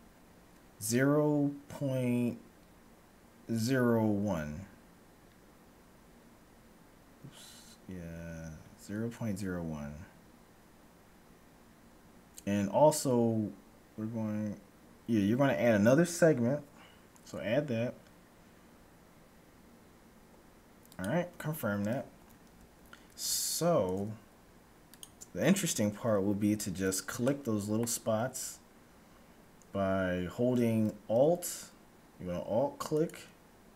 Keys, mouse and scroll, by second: 22.3 a, 23.3 ctrl+Tab, 25.5-29.1 middle drag, 26.6-27.1 scroll up 1, 33.0-33.7 right drag.